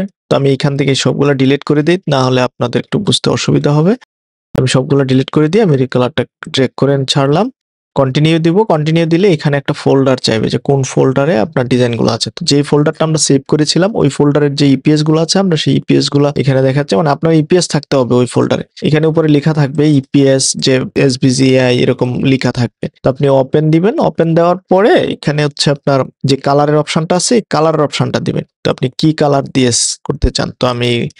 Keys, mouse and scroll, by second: 0.0 click, 0.7 click, 2.9 BackSpace, 5.1 click, 5.5 click, 6.5 click, 7.3 click, 8.7 click, 10.2 click, 30.8 0.